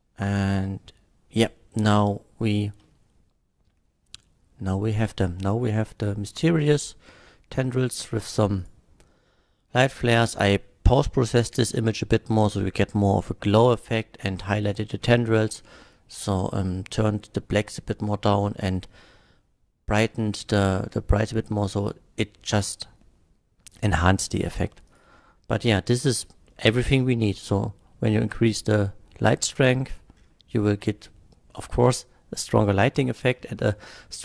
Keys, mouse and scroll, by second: 8.6 click, 24.2 typing, 24.9 click, 26.0 click.